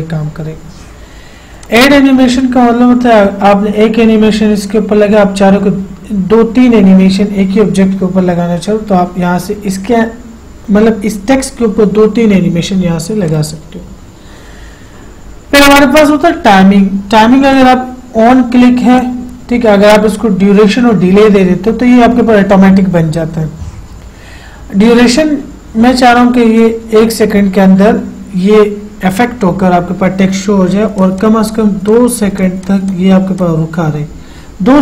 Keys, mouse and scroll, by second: 1.9 click, 13.6 click, 17.9 click, 26.9 click, 31.3 click.